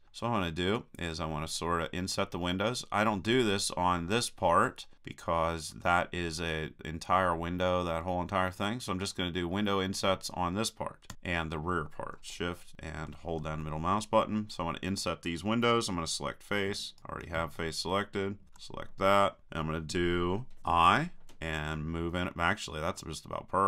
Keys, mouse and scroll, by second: 0.2-2.6 middle drag, 4.9-9.5 middle drag, 11.1 KP_3, 17.0-19.4 right drag, 19.4 click.